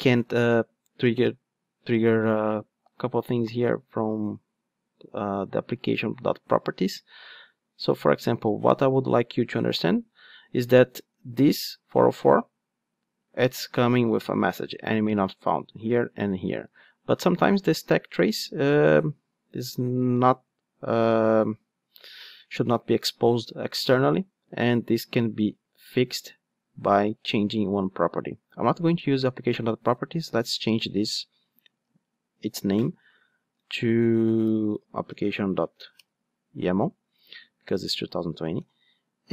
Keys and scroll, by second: 32.7 shift+F6, 33.5 alt+shift+Right.